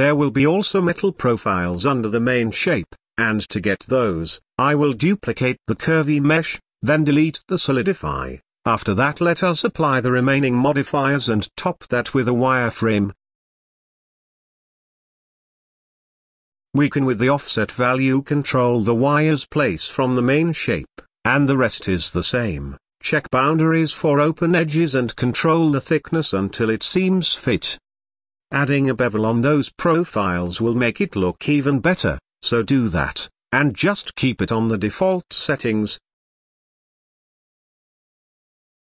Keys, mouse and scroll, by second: 2.7-4.0 drag, 4.4 shift+d, 6.6-7.5 drag, 7.7-9.7 drag, 10.1-12.2 middle drag, 12.9-14.5 drag, 14.5-14.9 scroll up 2, 14.9-15.6 middle drag, 15.6-16.8 drag, 16.8-17.3 middle drag, 17.3 scroll up 4, 17.5-18.3 shift+middle drag, 18.3 ctrl+a, 19.8-21.3 drag, 21.4-22.8 shift+drag, 24.2 click, 24.8-26.1 shift+middle drag, 26.1 click, 27.0-29.1 drag, 30.3-31.3 middle drag, 31.3-32.8 scroll up 1, 32.8 scroll up 1, 32.9-33.6 shift+middle drag, 33.6-35.8 scroll down 5, 35.8 scroll up 2, 36.2-37.2 shift+drag, 37.2-37.9 scroll down 5, 37.4 drag, 37.9-38.5 middle drag.